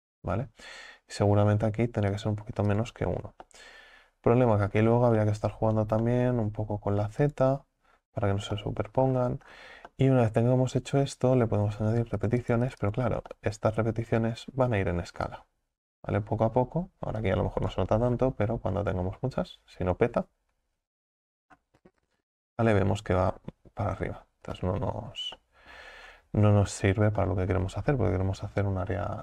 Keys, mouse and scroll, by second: 2.1-3.5 drag, 3.5-4.9 middle drag, 4.9-5.3 scroll up 6, 5.3-6.4 middle drag, 6.4-6.9 scroll down 1, 6.9-7.2 scroll down 1, 7.2 click, 8.5 scroll up 1, 8.6-9.1 middle drag, 9.1-10.0 scroll down 6, 10.0-12.2 middle drag, 12.2-13.3 drag, 13.3-14.7 middle drag, 14.7 KP_1, 17.2-20.5 drag, 20.5-22.2 scroll down 23, 22.7 scroll down 4, 23.4 scroll down 5, 23.9 scroll up 1, 25.4 middle click, 26.1-27.0 scroll up 15, 27.2-29.2 shift+middle drag.